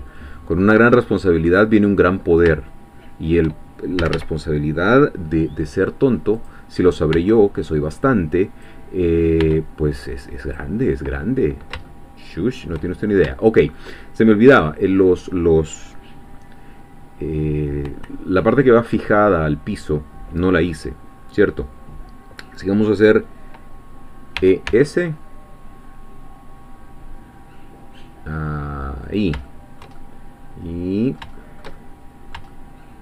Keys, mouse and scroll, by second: 0.1-2.2 shift+middle drag, 2.2 scroll up 1, 2.5 shift+scroll down 1, 2.7 shift+middle click, 4.0 a, 6.4 click, 7.1 b, 8.1-9.4 drag, 9.4 b, 10.1-11.7 drag, 11.9-12.9 shift+middle drag, 13.0-13.4 shift+scroll up 2, 13.4 shift+middle click, 24.4 e, 24.7 s, 29.1 click, 29.5-31.3 shift+middle drag, 31.3-32.1 shift+scroll down 2, 32.1-33.0 shift+middle drag.